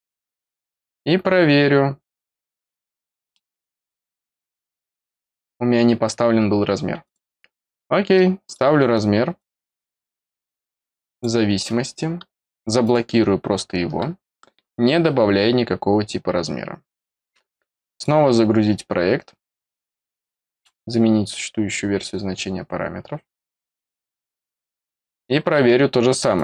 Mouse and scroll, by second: 0.5 click, 3.3 middle click, 4.3 click, 7.0 click, 8.4 click, 9.3 click, 10.3 click, 11.1 click, 12.8 click, 17.9 click, 20.4 click, 24.2 click, 25.3 middle click, 25.6 middle click, 26.3 click.